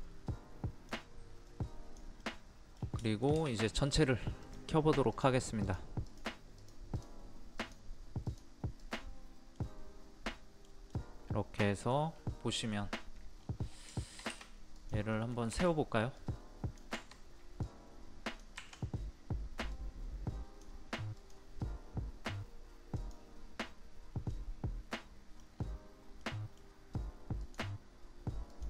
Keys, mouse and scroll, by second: 1.4 click, 2.2 middle click, 2.7 scroll down 1, 2.8 scroll up 1, 3.0 shift+middle click, 4.4 click, 9.6-12.1 middle drag, 12.1 scroll up 1, 13.3-13.6 scroll down 1, 14.0 shift+middle click, 14.7 click, 15.1 middle click, 16.1 click, 18.6 Escape, 19.7-20.8 drag, 24.3 middle click, 25.5-26.2 scroll down 1, 26.2 middle click, 27.4 click.